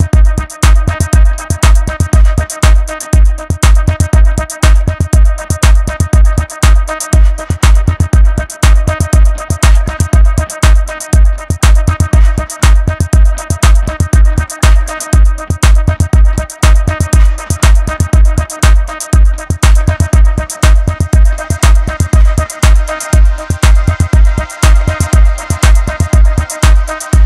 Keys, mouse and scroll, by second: 0.4 click, 6.3 click, 6.9 click, 9.9 click, 10.7 click, 12.4-12.9 scroll down 3, 12.9 Tab, 13.3 scroll up 1, 13.4-14.8 middle drag, 14.8 KP_1, 15.3 alt+z, 15.8-18.9 shift+middle drag, 24.7-25.1 scroll up 1, 25.1-25.7 scroll down 4, 25.7-26.6 middle drag, 26.6 Tab, 26.8 scroll up 1, 26.9-27.2 middle drag.